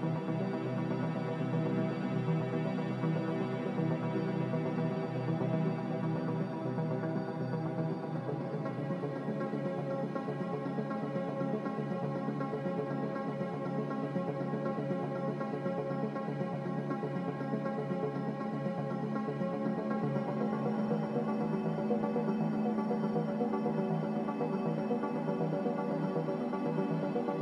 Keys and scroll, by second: 6.3 5, 26.6-27.4 typing.